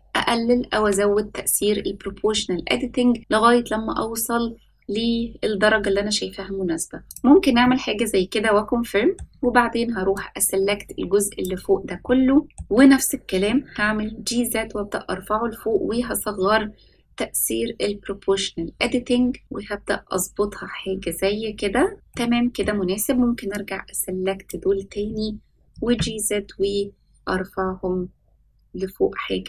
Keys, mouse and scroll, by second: 7.6-9.1 middle drag, 10.1-12.4 drag, 12.4 middle click, 13.3 g, 22.0 middle click, 23.5 click, 25.6 g.